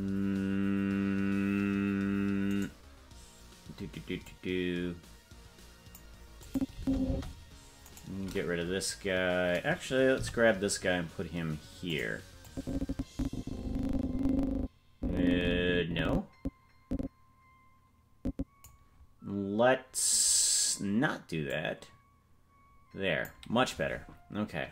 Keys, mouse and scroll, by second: 2.6 right click, 4.2-6.0 drag, 6.4 click, 6.7 space, 7.1 space, 7.9 right click, 10.2 g, 12.4-18.7 drag, 20.3-21.5 scroll down 3, 21.5-23.3 drag, 23.9 scroll up 3.